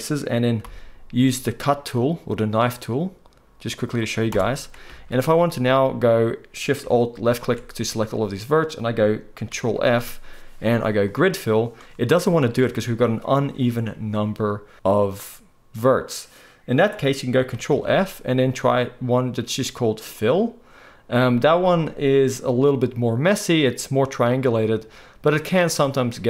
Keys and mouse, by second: 0.6 k, 4.9 alt+a, 7.3-10.3 alt+shift+middle drag, 9.7 ctrl+f, 17.5-20.2 ctrl+middle drag, 17.7 ctrl+f, 20.9-26.2 middle drag.